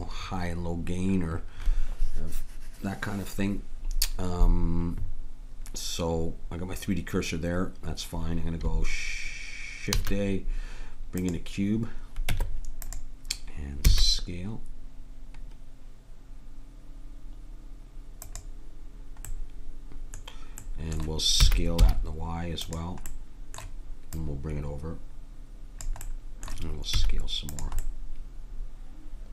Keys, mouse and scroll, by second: 9.9 shift+a, 12.3 Tab, 13.8 s, 19.3-20.3 middle drag, 21.4 s, 23.3 middle click, 24.1-26.2 drag, 26.9 s.